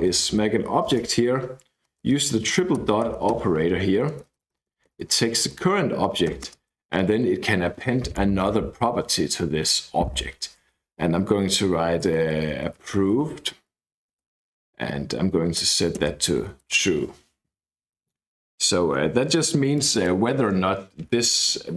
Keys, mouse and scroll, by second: 0.5 Right, 1.4-1.8 Left, 2.8 ., 3.1 ., 3.7 Escape, 4.0 Right, 4.2 Right, 4.3 Right, 4.5 Right, 4.6 Right, 5.0 Right, 5.1 Right, 5.3 Right, 6.3 ,, 6.4 space, 11.8-14.1 typing, 15.6-17.1 typing, 19.7 click.